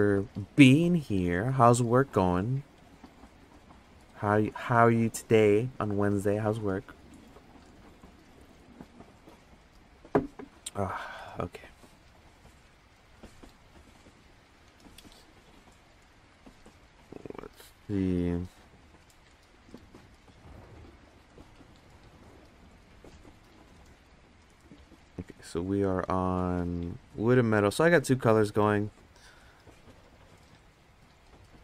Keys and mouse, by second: 17.5-18.8 middle drag, 21.5 click, 27.1 click, 28.3 click, 30.9-31.6 drag.